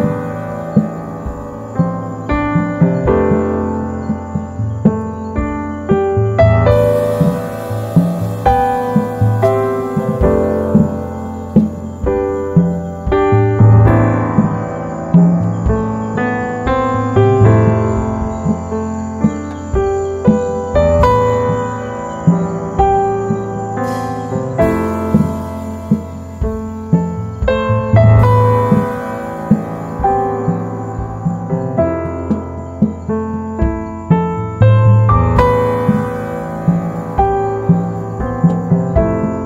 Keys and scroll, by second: 26.0-27.2 typing, 27.2 Return.